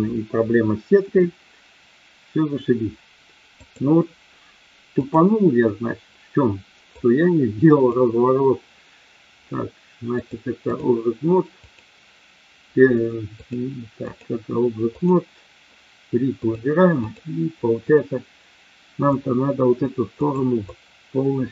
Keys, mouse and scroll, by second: 3.6-5.1 drag, 6.9-7.9 drag, 10.2 click, 11.6 click, 13.4 click, 14.9 click, 16.3-17.2 drag, 19.1 click, 20.2 click, 20.7-21.5 drag.